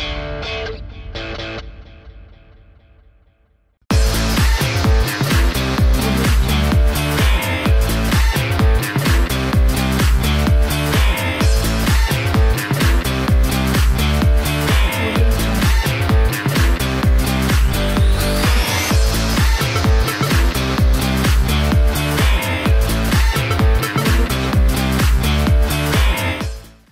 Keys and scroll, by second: 13.9 space.